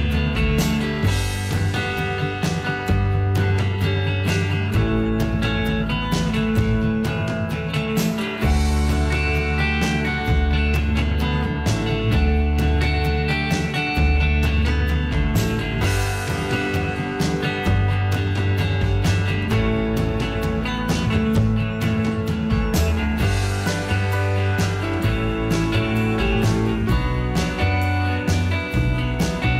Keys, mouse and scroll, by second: 2.1 F2, 16.2 h, 17.1 h, 27.0 F2.